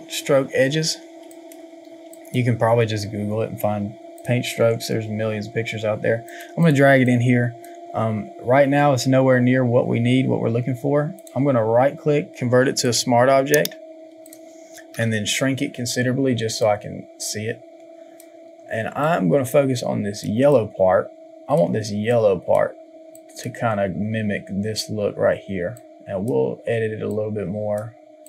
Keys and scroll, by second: 14.8 ctrl+t.